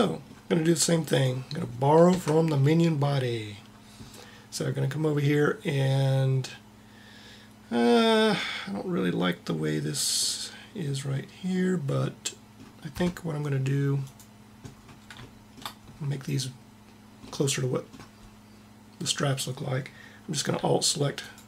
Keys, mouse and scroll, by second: 1.0-2.1 drag, 2.1 Tab, 2.7 middle click, 4.4-6.0 middle drag, 14.1 click, 21.3-21.4 drag.